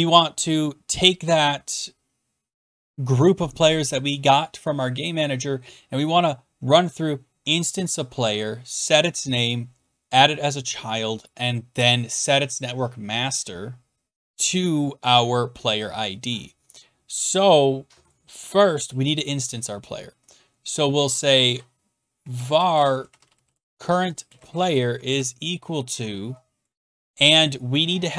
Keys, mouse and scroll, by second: 21.4-25.4 typing.